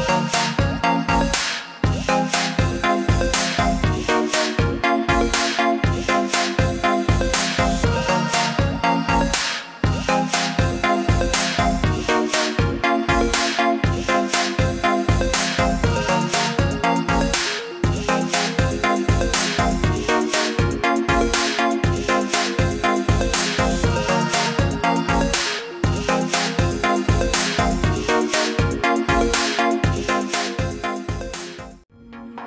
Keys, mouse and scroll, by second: 0.2 click, 8.7 click, 12.2 ctrl+z, 14.5 click, 18.5 alt+click, 20.9 alt+click, 21.8 alt+click, 22.9 ctrl+z, 23.9 ctrl+z, 27.0-27.7 alt+scroll up 3, 28.6 click.